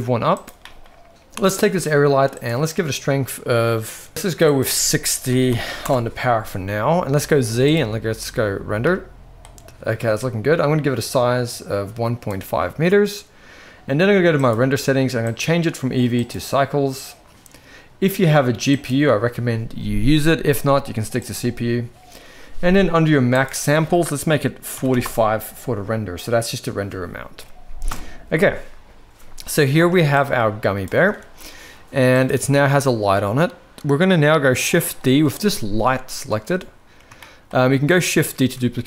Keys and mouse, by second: 0.6 middle click, 4.5-5.8 drag, 7.2 z, 8.8-9.4 middle drag, 11.1-12.4 drag, 14.4 click, 15.3-16.5 drag, 18.6-21.5 drag, 23.3-25.1 drag, 27.9 KP_0, 29.8 ctrl+b, 31.2 ctrl+s, 32.1 click, 37.2 shift+middle drag, 38.4 shift+d.